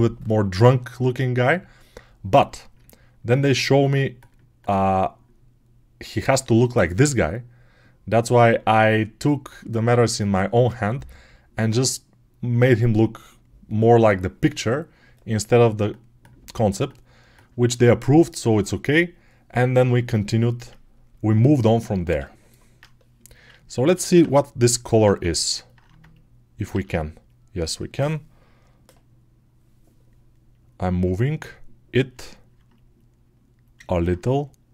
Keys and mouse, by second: 26.6 alt+q, 33.6 alt+right click, 33.9 right click.